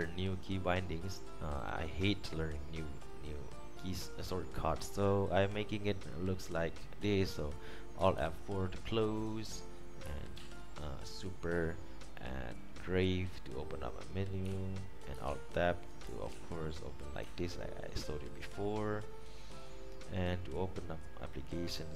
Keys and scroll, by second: 8.4 alt+F4, 10.5 super+`, 14.8 Escape, 15.4 alt+Tab, 16.2 Tab, 16.5 Tab, 17.4 Escape.